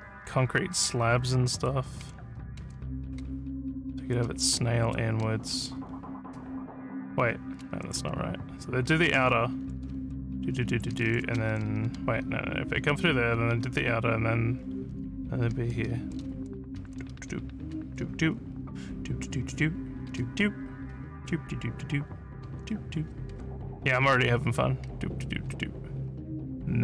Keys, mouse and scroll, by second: 0.0-5.8 typing, 7.3-12.5 typing, 13.6 a, 15.2-18.3 typing, 20.1 w, 20.9 w, 22.4 w, 23.7 a, 24.1 d, 24.8 w.